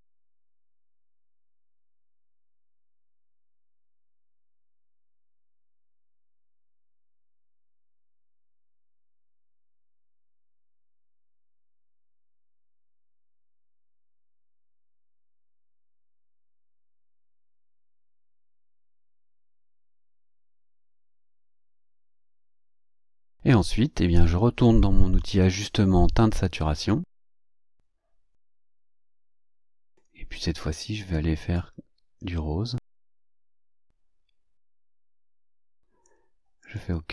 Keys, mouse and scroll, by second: 0.0 click, 2.3-9.3 drag, 10.3-13.3 drag, 14.1-16.6 drag, 17.3-19.7 drag, 20.0-21.6 drag, 22.1-22.4 ctrl+scroll down 2, 23.2 ctrl+scroll down 2, 25.3 click, 28.4 click, 29.2-30.1 drag, 31.5-36.3 drag, 36.6 click.